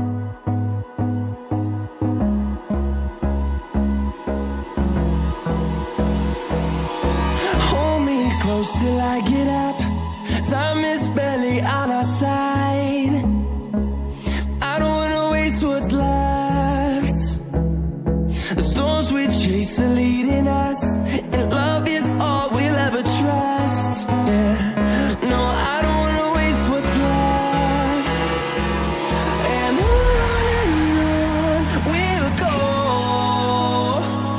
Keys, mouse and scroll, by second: 0.2 click, 8.8 double click, 9.4 click, 10.0 click, 11.4 click, 15.6 right click, 16.5 click, 17.3 double click, 18.9 click, 24.9 double click, 25.6 click, 29.1 ctrl+z, 29.6 click, 31.4 click, 33.2 click, 33.5 double click, 34.2 click.